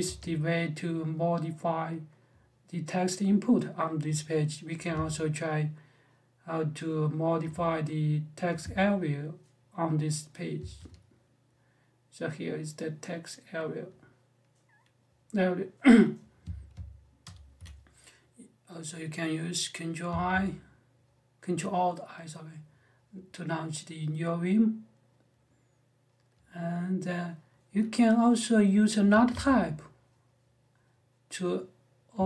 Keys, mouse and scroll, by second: 10.3 g, 17.0 ctrl+alt+i, 19.8 a, 28.9 space, 29.1 t, 30.3 typing, 31.9 space, 32.0 f.